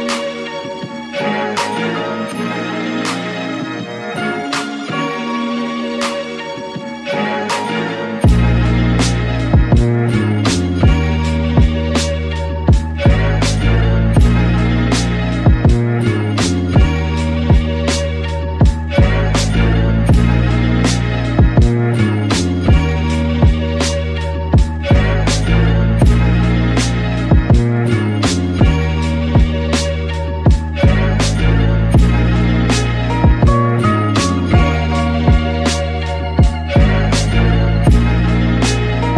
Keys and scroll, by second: 14.9 alt+Right, 21.8 alt+Right, 31.4 Escape, 37.4 alt+Right.